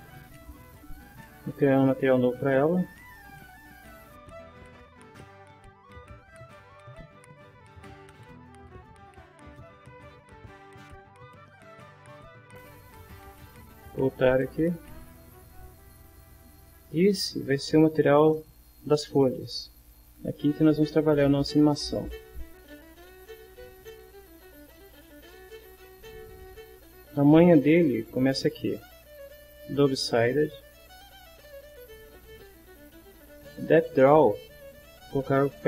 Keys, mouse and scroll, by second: 1.0 click, 2.1 click, 3.3 click, 4.1 click, 4.7 click, 4.8 click, 5.3 click, 5.5 click, 5.7 right click, 6.1 click, 6.2 right click, 6.5 click, 6.7 click, 6.9 right click, 7.5 click, 7.7 click, 7.8 click, 8.0 click, 8.2 click, 8.4 click, 8.5 click, 9.0 click, 9.4 click, 9.9 click, 10.3 click, 10.6 click, 11.2 click, 11.8 ctrl+middle click, 12.3 middle click, 12.5 ctrl+middle click, 14.1 click, 15.1 click, 19.8 click, 22.3-23.5 drag, 24.2-25.3 drag, 30.5 click, 31.4-32.7 drag, 34.3 click.